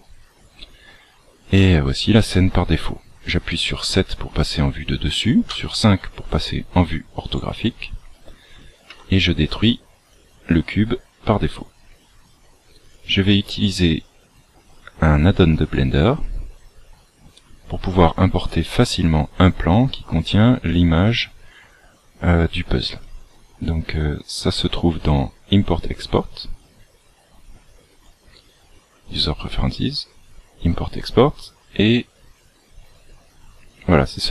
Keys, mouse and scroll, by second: 3.6 KP_7, 6.9-7.2 scroll up 1, 8.9 x, 12.8 click.